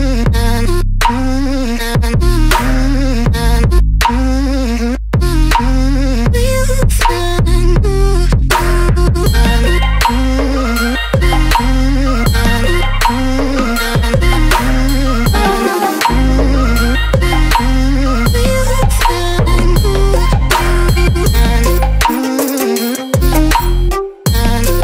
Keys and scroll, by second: 4.0 Caps_Lock, 5.6 ctrl+z, 9.2 ctrl+z, 12.4 ctrl+[, 15.2 ctrl+], 19.7 space, 24.3 ctrl+BackSpace.